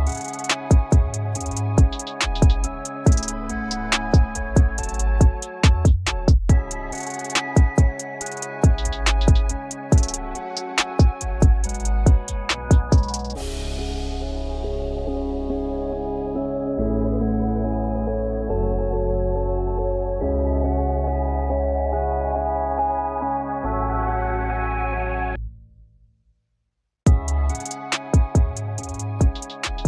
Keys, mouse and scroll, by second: 0.6-1.0 scroll up 1, 10.8 double click, 16.6 double click, 24.0 double click, 25.8-26.1 scroll up 1, 29.3 double click.